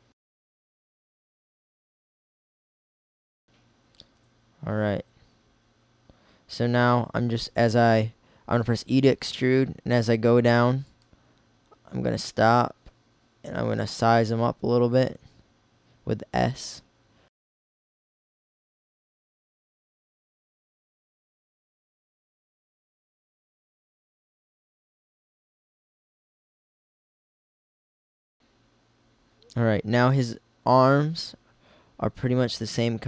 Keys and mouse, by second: 0.5 middle click, 1.1 middle click, 1.7 r, 3.1 KP_1, 4.1 e, 11.2 middle click, 12.0 s, 15.7 e, 17.6-19.5 typing, 20.6-22.3 typing, 25.1 click, 26.4-27.5 drag.